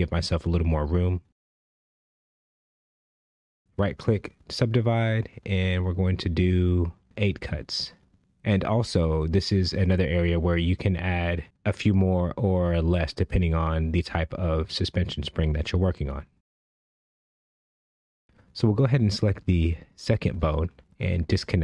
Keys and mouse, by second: 0.0 shift+middle click, 0.7 click, 1.7 g, 3.6 click, 4.0 right click, 7.6 click, 8.6 click, 10.3 click, 11.7 click, 20.2 click.